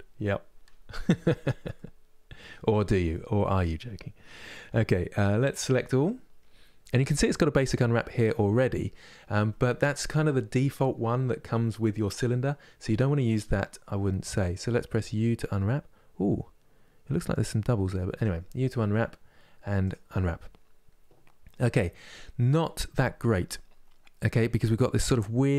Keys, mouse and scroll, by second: 1.4-3.6 middle drag, 3.6-5.3 scroll up 6, 5.3 a, 19.5 u.